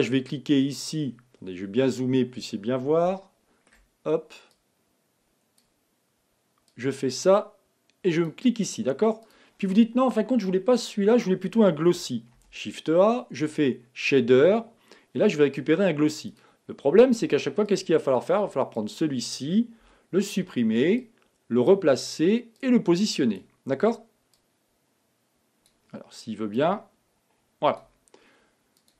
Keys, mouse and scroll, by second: 1.5-2.0 scroll up 1, 2.1-2.6 scroll up 2, 2.6-3.2 scroll up 1, 3.2-4.5 shift+middle drag, 4.5 click, 6.8 click, 9.3 click, 12.4 shift+a, 18.8 click, 19.8 x, 21.0 click, 23.4-25.1 drag, 26.5 click, 28.9 click.